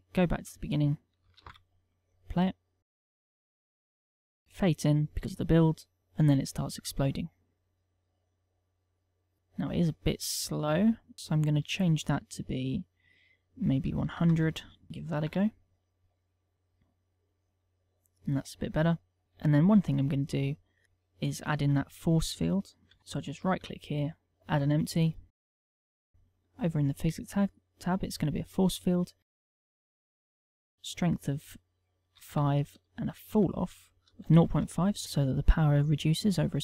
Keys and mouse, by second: 0.2 click, 1.1 alt+a, 9.3 click, 10.0 middle click, 10.7 click, 11.1 ctrl+click, 14.9 alt+a, 14.9 right click, 19.2 click, 23.0 right click, 23.4 shift+a, 26.0 click, 26.7 click, 30.5 ctrl+click, 32.8 ctrl+click.